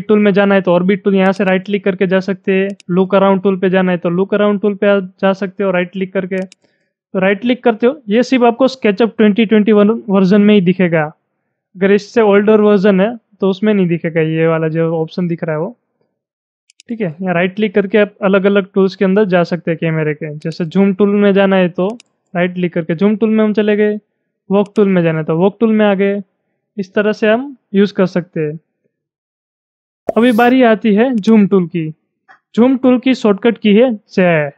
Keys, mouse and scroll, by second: 1.3 right click, 2.7 click, 6.4 click, 6.4 double right click, 16.7 right click, 20.4 click, 21.9 right click, 24.6 click, 31.2 click, 34.4 z.